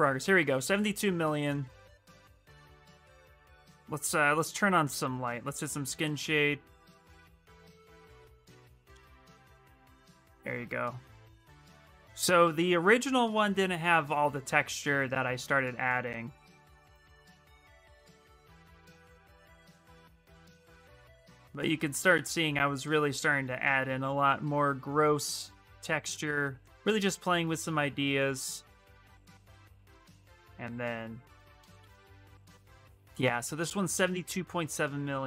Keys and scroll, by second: 25.7 s.